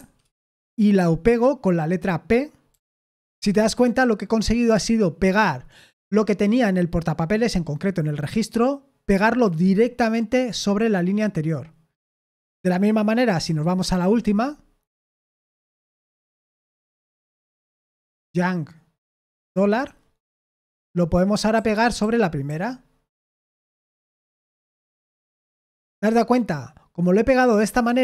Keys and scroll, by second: 2.7 p, 13.8 shift+-, 15.6 typing, 16.7-18.2 typing, 19.5 typing, 21.5-22.4 typing, 25.0 typing.